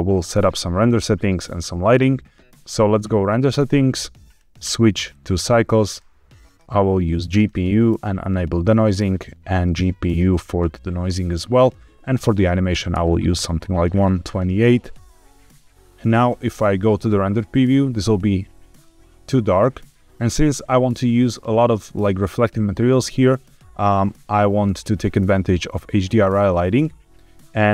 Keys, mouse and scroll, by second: 3.1 click, 4.2 click, 4.4-5.2 drag, 5.8-6.6 drag, 7.2-8.6 drag, 9.0-10.0 scroll down 1, 10.0-11.1 drag, 11.5-12.9 drag, 13.8-14.5 scroll up 2, 15.7 middle click, 16.2 z, 18.7-19.8 middle drag, 27.4 click.